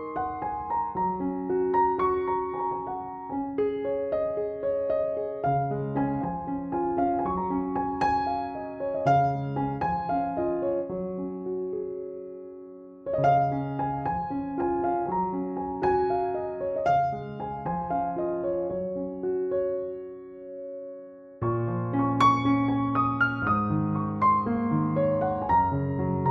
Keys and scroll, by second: 8.8 space.